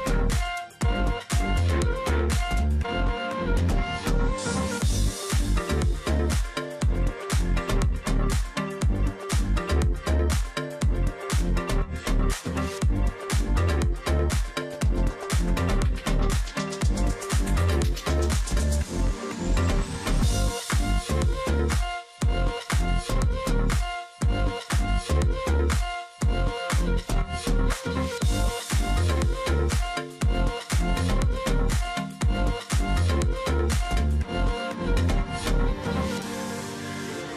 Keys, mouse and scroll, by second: 0.2 space, 0.7 ctrl+click, 1.0 alt+scroll down 1, 1.2-2.0 alt+scroll up 2, 1.3 space, 2.0 alt+scroll down 1, 2.2-2.7 alt+scroll up 1, 2.7-3.2 alt+scroll down 1, 3.2 space, 3.7 alt+scroll up 1, 4.1 space, 7.9 ctrl+z, 11.6 ctrl+z, 13.3 ctrl+click, 16.2 ctrl+click, 17.0 ctrl+click, 17.7 ctrl+click, 19.0 ctrl+click, 19.7 ctrl+click, 20.7 ctrl+click, 21.6 ctrl+click, 23.1 ctrl+click, 24.4 ctrl+click, 25.2 ctrl+click, 25.8 Delete, 26.4-26.9 alt+scroll up 1, 28.5 space, 29.8 alt+scroll down 1, 29.9-30.7 alt+scroll up 1, 30.7 ctrl+click, 31.5 ctrl+click, 32.3 ctrl+alt+click, 33.0 double click, 35.3 double click, 36.4 ctrl+click.